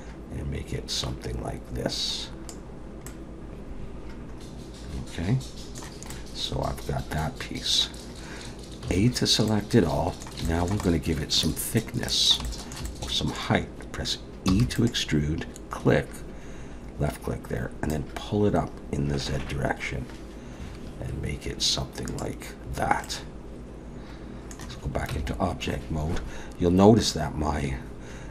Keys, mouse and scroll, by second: 3.1 middle click, 6.2 middle click, 8.8 a, 9.5 middle click, 10.5 shift+middle click, 10.8 middle click, 11.8 middle click, 12.4 shift+middle click, 12.9 middle click, 14.5 e, 17.9 click, 23.0 middle click, 25.1 Tab.